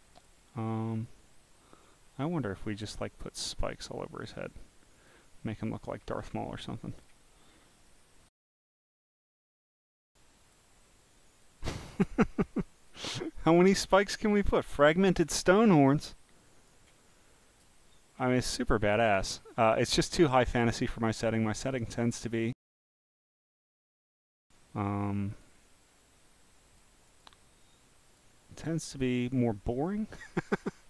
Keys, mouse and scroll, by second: 0.2 click, 1.0 click, 2.1 click, 4.9 click, 6.9 click, 7.5 click, 9.4 click, 10.4 click, 11.2 click, 12.8 click, 14.7 click, 15.4 click, 17.1 scroll down 1, 17.6 click, 18.6 click, 19.5 scroll, 19.6 scroll, 19.6 scroll, 20.0 scroll, 20.3 click, 21.6 click, 23.6 click, 24.1 click, 25.3 click, 26.7 click, 27.1 click, 28.1 click, 28.9 click, 29.7 click, 30.3-30.8 drag.